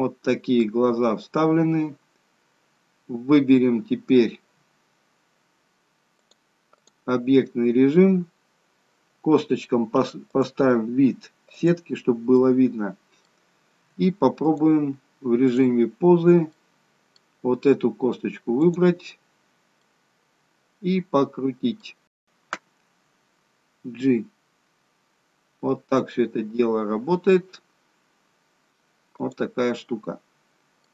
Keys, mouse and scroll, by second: 1.0-1.7 scroll up 2, 6.2 click, 10.4 click, 12.5 middle click, 14.7 click, 16.6 middle click, 16.6-17.5 scroll up 1, 18.8 click, 19.9 middle click, 23.7 g, 29.6 middle click.